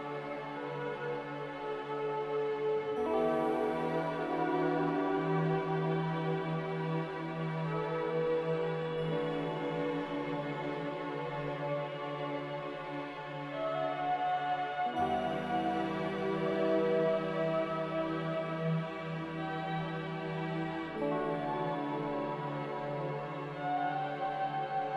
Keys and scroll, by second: 0.2 ctrl+g, 3.8 z, 7.3-8.2 typing, 10.9 n.